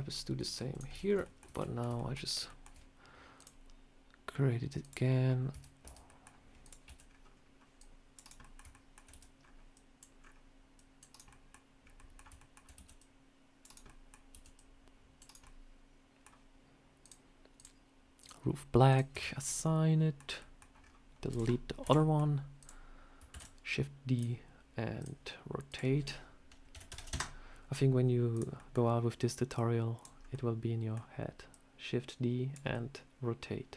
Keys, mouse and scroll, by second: 0.2 middle click, 0.6 click, 0.8 Tab, 0.9 scroll up 1, 1.1 shift+middle click, 1.1 shift+middle click, 1.4 a, 1.5 middle click, 1.8 shift+middle click, 2.3 shift+middle click, 3.2 click, 5.0 scroll up 2, 5.4 Tab, 5.7 Tab, 5.9 middle click, 6.5 click, 6.7 c, 8.3 middle click, 8.6 shift+middle click, 8.9 c, 11.1 middle click, 11.7 scroll up 2, 11.8 middle click, 12.2 shift+middle click, 12.6 c, 13.7 middle click, 14.2 c, 15.3 middle click, 16.9 click, 17.4 click, 18.7 click, 19.0 Tab, 19.1 scroll down 2, 19.3 middle click, 20.2 middle click, 20.6 scroll down 2, 21.1 click, 21.7 Delete, 21.8 middle click, 22.4 click, 23.2 shift+d, 24.0 click, 24.8 click, 25.5 click, 28.2 click, 28.4 middle click, 29.4 click, 30.0 scroll up 2, 30.2 middle click, 31.3 click, 32.6 middle click.